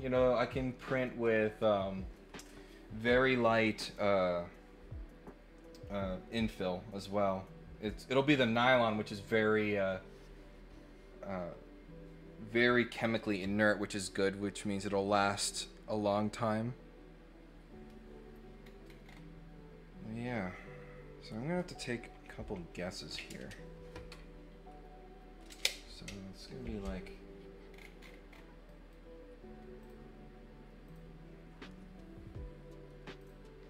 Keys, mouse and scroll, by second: 18.6-18.9 scroll down 2, 19.0 scroll up 1, 19.2 middle click, 19.2 scroll down 1, 27.7 scroll down 4, 28.0-28.4 scroll up 4, 28.6 right click, 29.8 click, 30.8 click, 33.2 click.